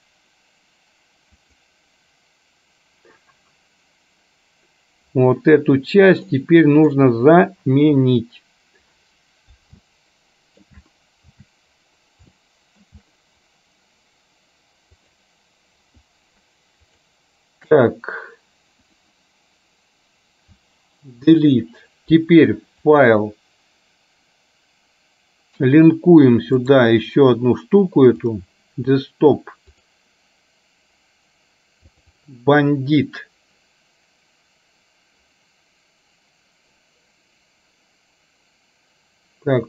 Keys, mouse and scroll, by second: 6.4 middle click, 10.0 shift+middle click, 12.5 shift+middle click, 15.0 click, 21.3 Delete, 23.0-27.0 drag.